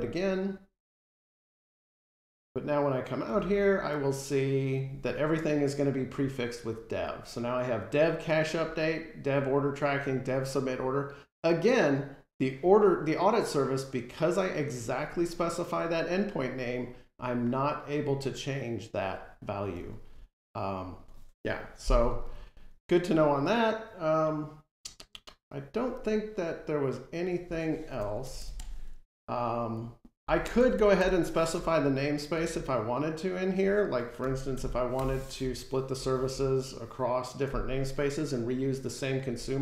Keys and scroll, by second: 34.8 Escape, 35.7 F5.